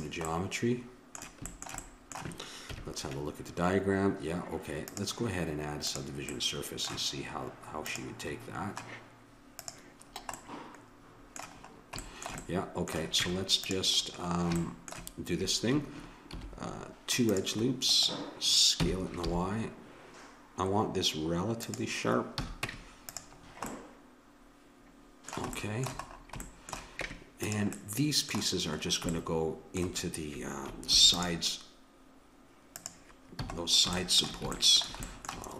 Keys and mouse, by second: 2.7 KP_1, 4.9-6.7 drag, 7.9-11.2 drag, 13.2 Tab, 16.3 ctrl+r, 18.9 s, 22.4 a, 22.7 Tab, 23.5-25.1 middle drag, 27.0 Tab, 30.9 ctrl+r, 33.3 a.